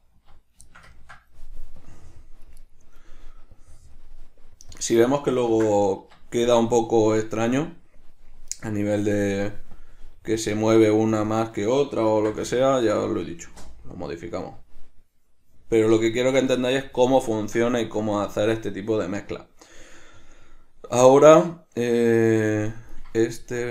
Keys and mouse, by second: 0.8-1.9 shift+middle drag, 1.9-2.7 drag, 2.7 right drag, 3.7-4.8 drag, 4.9-8.7 drag, 6.3 Escape, 8.7 right click, 9.9 click, 10.7 click, 11.3 click, 11.4-16.3 drag, 13.7 Return, 16.3-23.7 ctrl+middle drag.